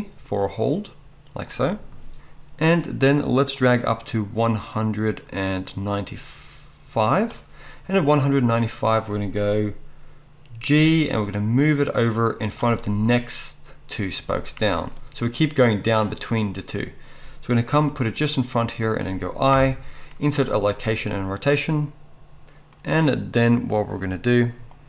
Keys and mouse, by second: 0.4-12.5 drag, 10.7 g, 12.5-24.8 middle drag, 17.7 g, 19.5 i.